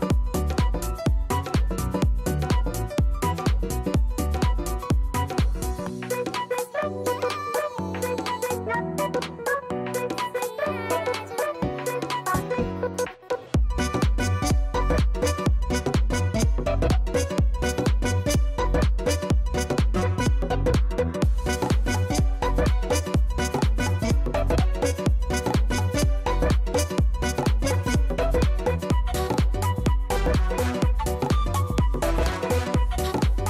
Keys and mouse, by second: 1.4 click, 2.4 click, 4.9 click, 5.7 click, 6.0 click, 6.7 click, 9.0 click, 10.0 click, 10.8 click, 12.5 click, 15.2 click, 17.5 click, 17.6 ctrl+alt+click, 17.7 click, 22.4 click, 25.5 click, 30.6 click.